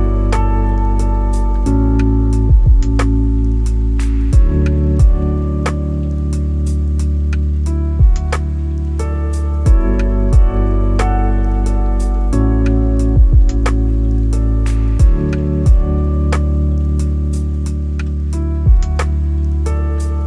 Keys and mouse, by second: 0.0 s, 2.1 Tab, 4.4-4.9 middle drag, 5.7 g, 7.7 click, 8.4 shift+middle click, 10.2-11.8 drag, 13.1 click, 13.9 click, 15.1-16.5 drag, 17.0 click, 18.7-20.2 drag.